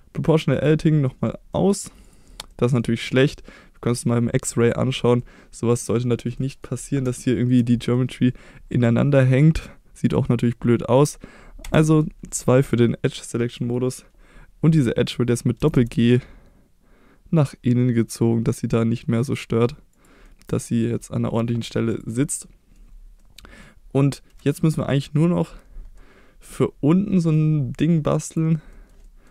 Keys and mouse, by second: 0.5 click, 1.1 middle click, 1.5 middle click, 2.5 middle click, 5.2 middle click, 6.4 middle click, 7.2 shift+middle click, 7.9 middle click, 11.6 2, 13.2 middle click, 15.1 middle click, 15.6 g, 15.7 g, 19.9 click, 20.2 middle click, 21.3 middle click, 22.3 middle click, 23.2 middle click, 26.0 middle click, 28.7 middle click, 29.1 middle click.